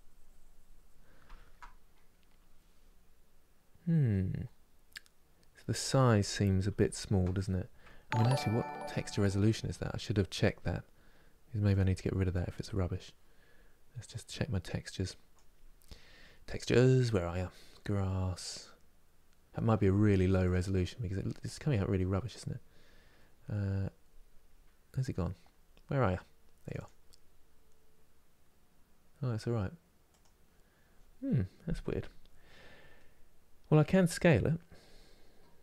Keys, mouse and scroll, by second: 1.1-6.0 ctrl+middle drag, 6.0 ctrl+z, 6.5 ctrl+z.